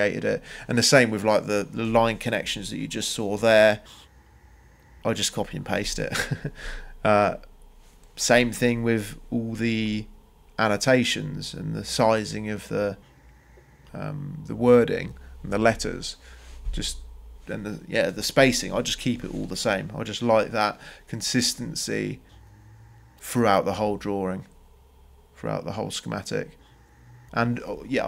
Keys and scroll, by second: 14.7 c, 15.2 Return.